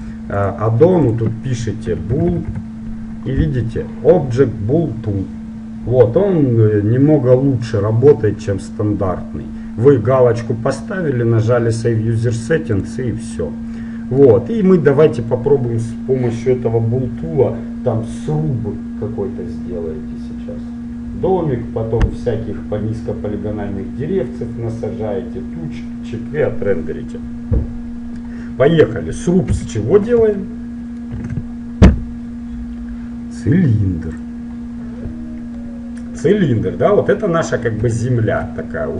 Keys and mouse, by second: 13.5-20.7 middle drag, 29.5 KP_1, 30.5-32.7 middle drag, 31.3 shift+a, 35.7-37.5 middle drag, 38.0 middle click.